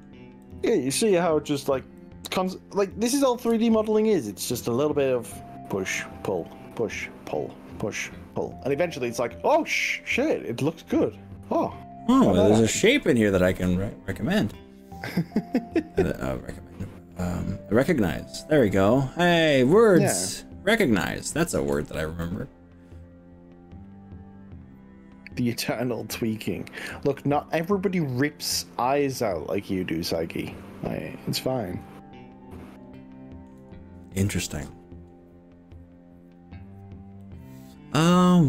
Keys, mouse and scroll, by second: 0.4 click, 2.0 click, 3.6 ctrl+z, 3.9-4.4 drag, 4.7-5.2 drag, 6.4 click, 9.0 click, 9.3-13.4 middle drag, 15.9-18.4 middle drag, 18.6-19.4 shift+middle drag, 19.5-20.8 middle drag, 21.0 shift+middle click, 22.2 middle click, 22.6-24.9 middle drag, 25.2-27.3 middle drag, 27.5 shift+middle click, 28.1 shift+middle click, 28.7-30.2 shift+middle drag, 30.3 shift+middle click, 31.3 shift+middle click, 31.8-32.6 shift+middle drag, 31.8 shift+scroll up 1, 33.0-33.5 shift+middle drag, 37.2-38.2 middle drag, 38.2-38.4 scroll down 4.